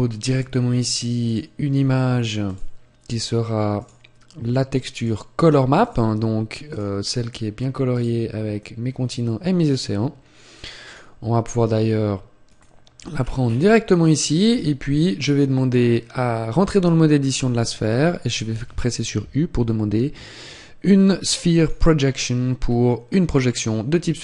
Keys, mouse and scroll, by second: 7.9 click, 12.4 click, 14.7 Tab, 14.7-17.9 scroll down 9.